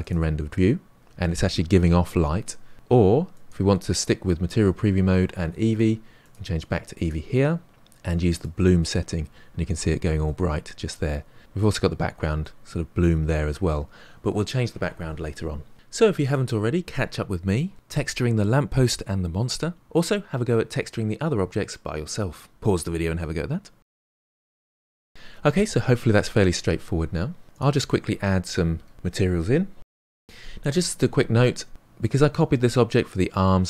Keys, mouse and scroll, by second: 0.8 click, 3.3 click, 7.0 click, 9.4-25.1 middle drag, 25.6 click, 26.4 click, 27.4 middle click, 27.5 scroll up 3, 27.6-28.9 shift+middle drag, 28.9 click, 29.6 click.